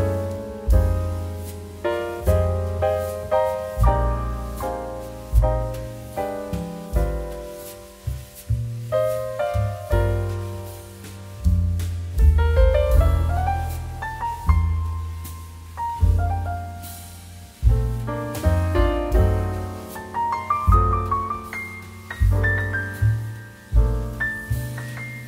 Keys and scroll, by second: 3.8 ctrl+z, 7.6 e, 11.3 [, 16.0 ctrl+d, 22.2 ctrl+j, 23.7 ctrl+t.